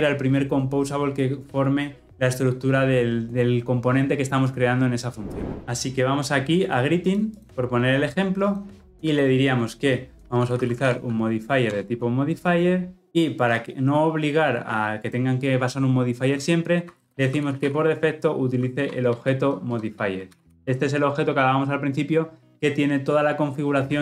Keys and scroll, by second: 20.2 Return, 20.4 ctrl+alt+l, 20.4 ctrl+alt+o.